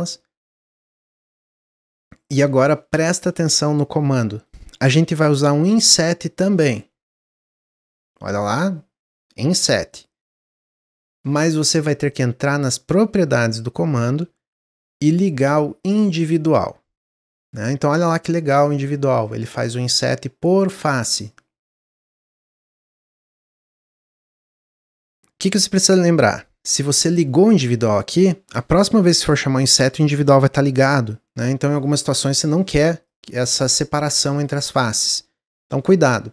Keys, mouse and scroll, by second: 6.0 i, 15.8 click, 18.2 click, 18.6 click, 19.1 click, 19.5 click, 21.3-24.4 shift+drag, 33.0 click, 33.7 click, 34.3 click, 34.8 click.